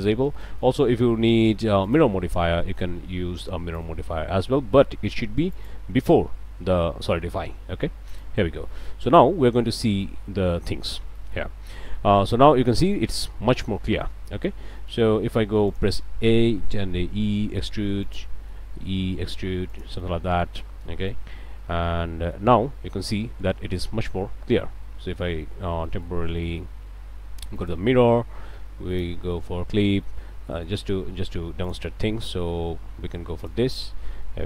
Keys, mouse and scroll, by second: 0.4 click, 1.8 click, 3.8 click, 5.5 click, 8.1 click, 8.7 middle click, 9.5 middle click, 10.0 middle click, 10.8 Tab, 11.6 middle click, 12.8 click, 13.8 click, 14.5 scroll down 1, 15.0 click, 15.1 a, 15.7 alt+click, 16.8 e, 18.0 click, 18.3 middle click, 18.7 e, 19.7 click, 20.1 middle click, 21.5-22.5 middle drag, 22.6 Tab, 23.0 click, 23.5 Tab, 23.8 middle click, 25.9 middle click, 26.2 Tab, 26.5 click, 27.6 click, 28.9 click, 29.3 middle click, 29.8 Tab, 30.0 middle click, 30.5 middle click, 31.6 click, 31.9 scroll up 1, 33.4 click.